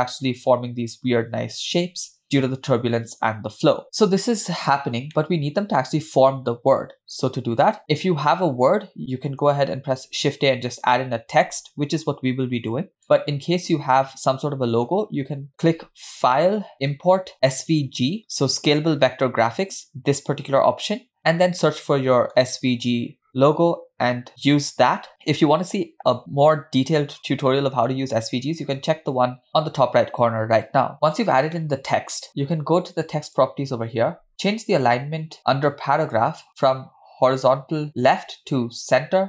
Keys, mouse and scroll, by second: 3.8 space, 5.3-6.3 middle drag, 7.7 space, 9.9 shift+a, 16.3-21.5 drag, 31.5-32.2 middle drag, 33.3 click, 35.4 drag, 36.1 drag, 37.3-39.2 drag.